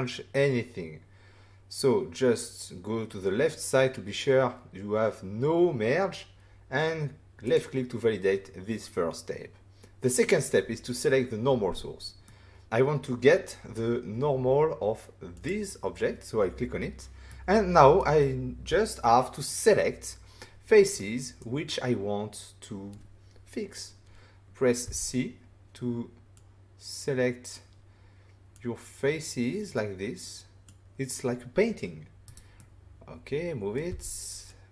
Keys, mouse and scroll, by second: 7.4 click, 12.2 middle click, 15.3 click, 17.2 middle click, 20.9 middle click, 24.8 c, 25.7 scroll up 1, 26.3 click, 28.5 click, 32.2 right click, 32.5 middle click, 33.8 c, 34.4 click.